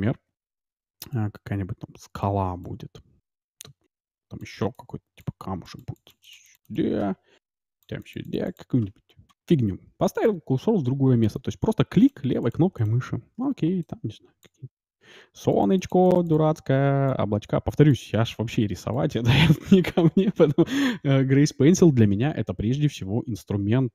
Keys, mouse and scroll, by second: 0.0-8.8 typing, 1.0-20.1 drag, 13.4-21.4 d.